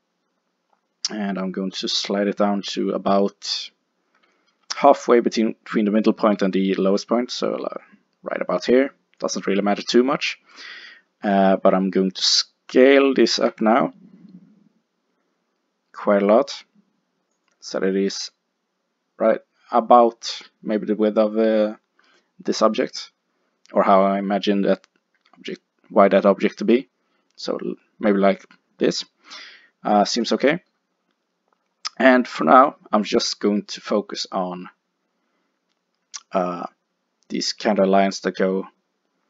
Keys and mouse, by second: 9.3 click, 11.1-12.2 middle drag, 13.4 s, 17.5 click, 19.3-21.0 middle drag, 23.4-26.7 middle drag, 25.2 s, 26.7-28.5 drag, 29.4-33.3 middle drag.